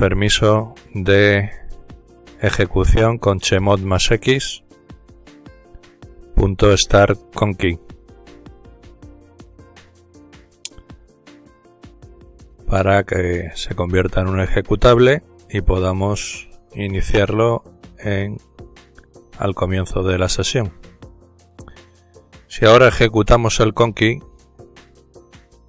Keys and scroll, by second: 0.0-0.2 typing, 2.1-2.9 typing, 5.0-12.6 typing, 14.5 typing, 18.2-19.9 typing.